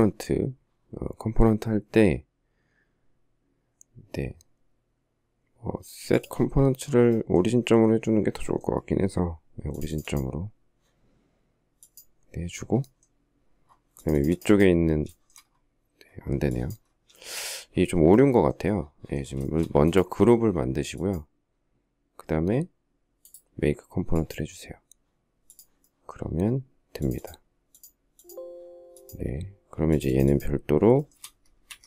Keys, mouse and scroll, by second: 15.0 shift+middle click, 15.0 shift+scroll, 15.1 shift+middle click, 16.9 shift+middle click, 19.4 shift+middle click, 30.8 shift+middle click, 31.5 Escape, 31.7 Escape.